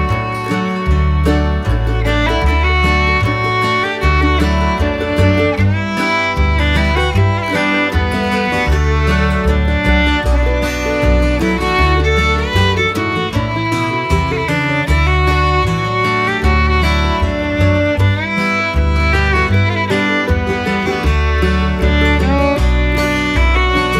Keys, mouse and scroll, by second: 0.4 middle click, 1.3 shift+middle click, 2.6 middle click, 3.3 shift+middle click, 4.2-5.4 middle drag, 5.9 middle click, 6.7 shift+middle click, 7.2-7.6 middle drag, 7.8 shift+middle click, 9.1 middle click, 10.3 middle click, 11.1 shift+middle click, 12.0 middle click, 12.5 shift+middle click, 13.0 middle click, 14.2 shift+middle click, 15.0 shift+middle click, 16.5 click, 17.4 click, 18.5-19.9 drag, 20.5-21.8 drag.